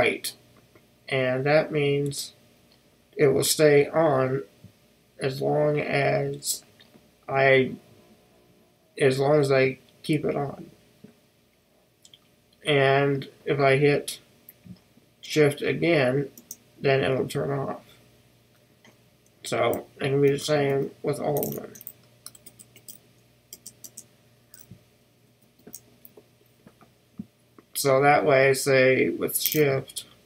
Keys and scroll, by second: 23.0 super+f.